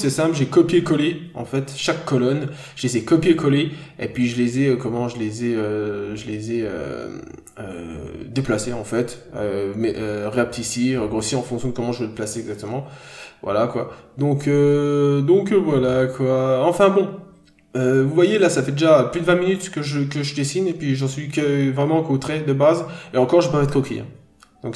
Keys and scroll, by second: 19.4 b, 23.7 scroll up 1, 24.0 n, 24.3 scroll down 1, 24.6 ctrl+d.